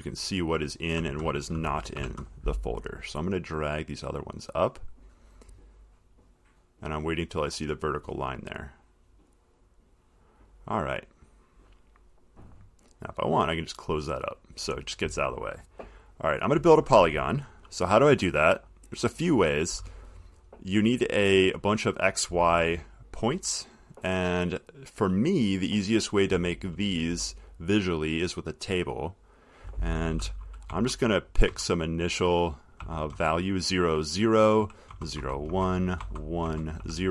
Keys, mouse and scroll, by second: 0.1 middle click, 0.8 middle click, 2.2 0, 5.0 click, 9.2 click, 10.4 click, 13.3 click, 14.5 click, 25.6 click, 28.8 click, 30.8 click, 30.9 0, 31.7 Tab, 33.0 0, 33.3 Tab, 34.8 0, 35.1 Tab, 35.4 1, 35.7 Tab, 36.7 Tab, 37.0 0.